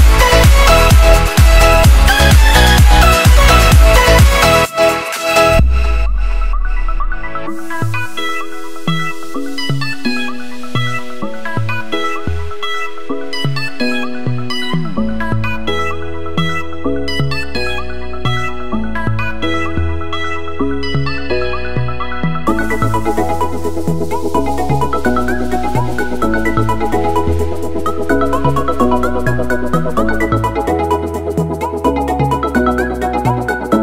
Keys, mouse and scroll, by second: 2.7 space, 9.1 click, 25.2 click, 31.8 click, 33.6 Return.